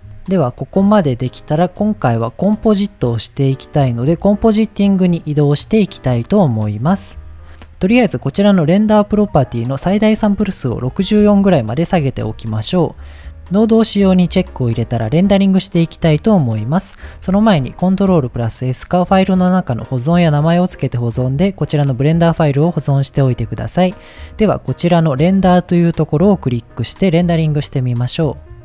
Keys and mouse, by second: 9.9-12.2 drag, 17.2 ctrl+s, 19.0-21.0 drag, 26.6 click.